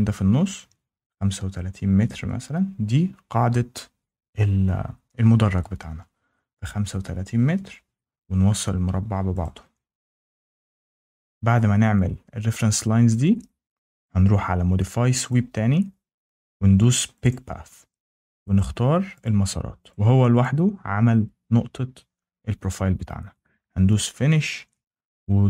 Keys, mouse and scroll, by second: 0.9-2.1 typing, 5.9-6.7 typing, 7.3 Return, 9.3 click, 10.3 click, 11.4 Escape, 15.2 click, 17.2 click, 18.4 click, 19.1 click, 19.8 click, 20.3 click, 22.3 Escape, 23.9 click.